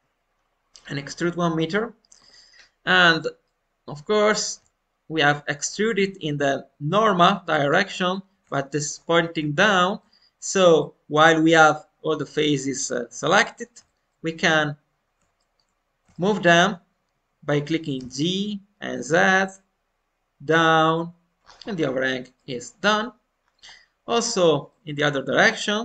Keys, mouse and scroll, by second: 3.4-6.4 middle drag, 7.5-8.9 alt+middle drag, 8.9-9.3 scroll up 2, 9.5-11.3 shift+middle drag, 11.3 scroll down 1, 13.3 middle click, 13.8 alt+middle click, 15.0-15.3 scroll up 2, 15.3-17.9 shift+middle drag, 17.9 g, 21.4-21.8 scroll down 2, 22.3 middle click, 22.3 scroll down 2, 23.1-23.8 scroll down 3, 23.6-25.3 middle drag, 25.4-25.8 scroll up 1.